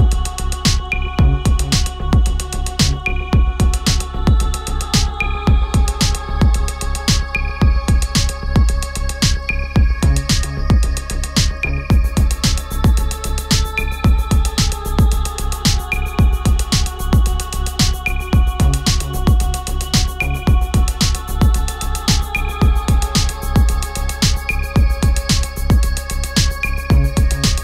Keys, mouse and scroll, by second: 2.6-7.7 drag, 9.1 ctrl+a, 9.5 BackSpace, 12.1 click, 18.5 ctrl+a, 19.0 BackSpace, 22.1 click, 25.4 click.